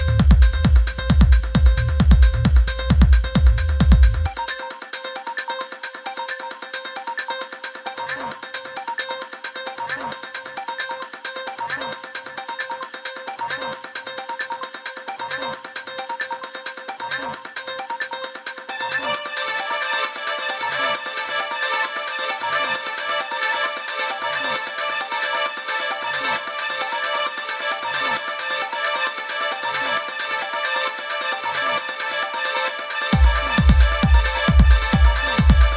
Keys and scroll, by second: 8.8 BackSpace, 11.1 BackSpace, 17.3 super+-, 18.0 i, 19.3 super+=, 21.5 super+f, 22.6 super+[, 35.2 super+c.